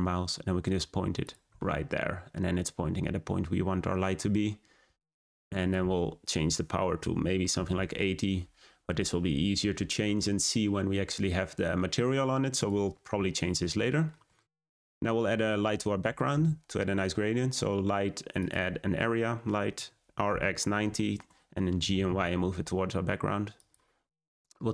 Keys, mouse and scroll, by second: 1.5-4.4 middle drag, 4.4-5.5 scroll down 2, 5.5-8.7 drag, 12.5 click, 12.8-13.2 scroll down 3, 13.9-16.3 shift+middle drag, 16.3 shift+a, 19.7 r, 21.7 g, 24.6-24.7 drag.